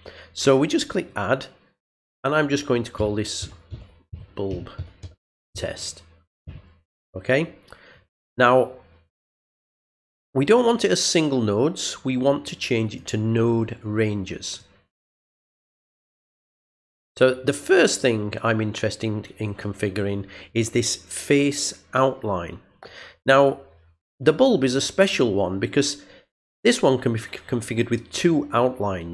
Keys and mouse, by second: 0.8 click, 10.1 click, 12.9 click, 13.9 click, 17.0-18.0 drag.